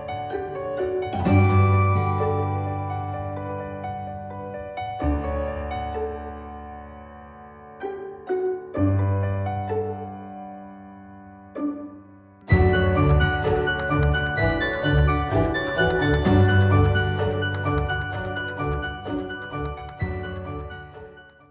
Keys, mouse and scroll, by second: 0.4 ctrl+g, 0.8 F4, 2.9 click.